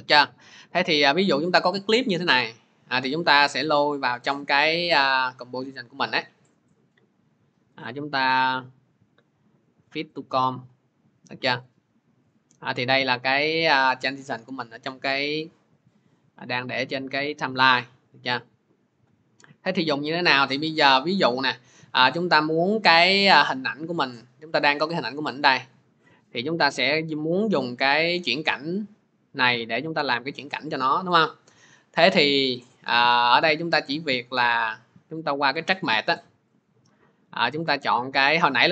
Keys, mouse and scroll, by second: 0.7 click, 2.3 click, 8.7 right click, 10.1 click, 17.0 click, 18.1 middle click, 21.2 click, 22.0 click, 27.5 click, 28.2 click, 33.8 click, 36.4 click.